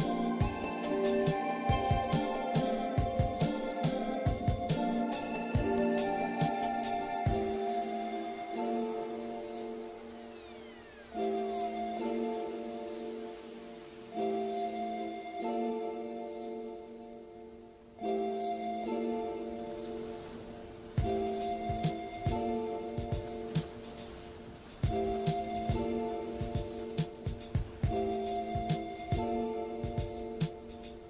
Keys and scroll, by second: 0.7 ctrl+z, 1.7 ctrl+z, 2.0 ctrl+z, 2.6 ctrl+z, 3.1 ctrl+z, 4.2 scroll down 1, 4.2 scroll up 1, 6.3 scroll down 2, 6.4 ctrl+z, 6.9 scroll up 1, 7.7 ctrl+z, 8.6 ctrl+z, 9.2 scroll down 1, 9.5 scroll up 1, 11.2 ctrl+z, 11.5 scroll up 1, 11.6 scroll down 1, 12.4 scroll up 1, 13.5 ctrl+z, 14.4 scroll down 1, 14.7 scroll up 1, 15.0 ctrl+z, 15.7 scroll down 1, 16.6 scroll up 1, 17.4 scroll down 1, 19.7 ], 20.0 scroll up 1, 21.0 scroll down 1, 21.2 scroll up 1, 21.8 ctrl+z, 25.8 ctrl+z, 26.8 ctrl+z, 29.4 ctrl+z, 30.5 ctrl+z.